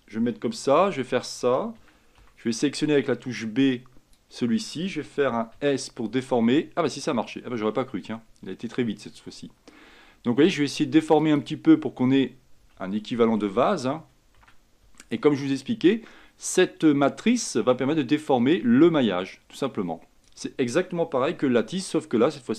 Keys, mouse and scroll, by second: 0.9 Tab, 1.9 a, 2.3 b, 5.7 s, 11.8-12.9 scroll up 5, 12.9-14.5 shift+middle drag, 14.5 a, 14.9 b, 21.6 s.